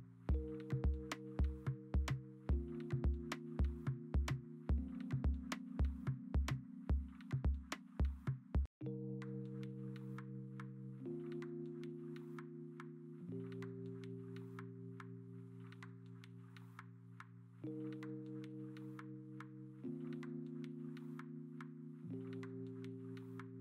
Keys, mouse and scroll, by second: 1.1-2.6 typing, 6.3 v, 7.7 b, 8.8 x, 14.4 x, 14.7 x, 15.0 ctrl+z, 16.2 ctrl+z, 18.1-19.2 scroll, 20.6 x, 21.0 x, 21.8 ctrl+z.